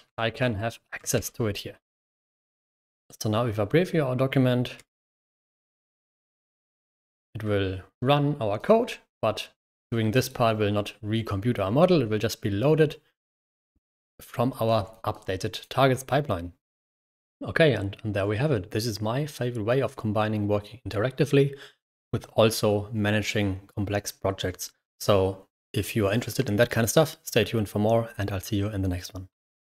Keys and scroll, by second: 0.0-0.2 typing, 1.1 ctrl+Return, 1.8-2.9 typing, 4.5-5.4 typing.